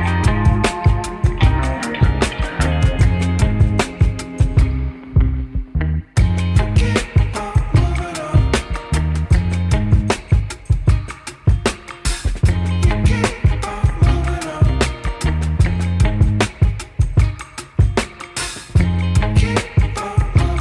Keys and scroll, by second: 2.5 ctrl+c, 4.6 0, 4.7 Return, 5.6 F4, 5.8 F3, 6.2 F3, 8.4 1, 9.5 ctrl+shift+e, 12.6 ctrl+z, 13.1 ctrl+shift+e, 14.6 ctrl+shift+e, 15.2 F3, 16.5 ctrl+shift+e.